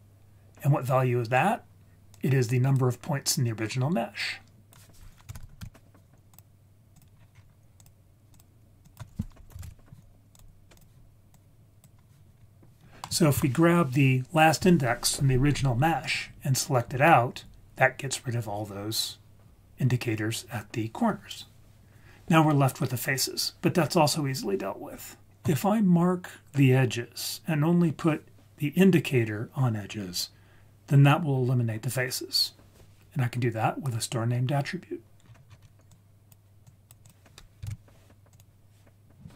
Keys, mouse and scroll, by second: 2.2 click, 4.2 click, 5.4 t, 6.9 click, 7.2 scroll down 2, 7.3-8.2 scroll up 2, 7.8 click, 8.3 click, 8.9 click, 10.8 click, 11.3 click, 12.4-12.7 scroll down 3, 12.5 scroll up 1, 13.0 middle click, 13.4-15.0 scroll down 1, 16.1-16.4 scroll down 1, 35.2 scroll down 3, 35.5-35.8 scroll up 4, 35.9-36.3 drag, 36.7 click, 37.7 shift+d, 38.3 click.